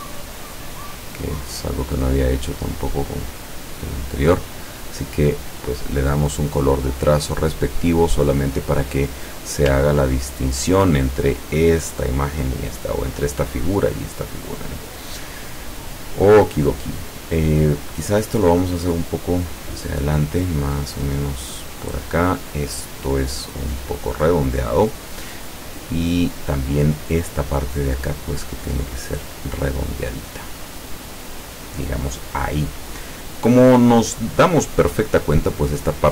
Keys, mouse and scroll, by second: 0.1 click, 0.9 click, 1.9 click, 2.9 click, 6.0 click, 7.1 click, 7.8 click, 10.0-10.3 ctrl+scroll up 2, 13.0 scroll down 2, 15.0-15.4 scroll down 2, 18.3-22.4 drag, 23.2 click, 25.7-26.5 scroll up 2, 28.8-32.4 drag.